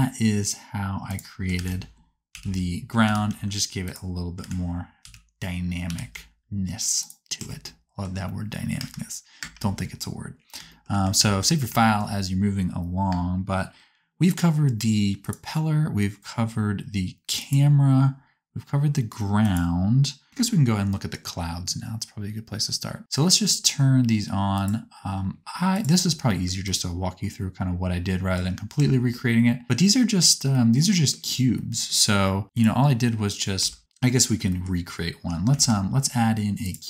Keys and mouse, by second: 1.5 alt+a, 2.3 l, 3.1 g, 4.4 alt+a, 5.0 l, 5.9 g, 7.4 Tab, 8.7 KP_0, 9.3 space, 11.3 ctrl+s, 13.1 space, 19.4 click, 24.5 click, 25.7 click, 28.9 Tab, 32.5 click, 33.7 Tab, 35.5 shift+a.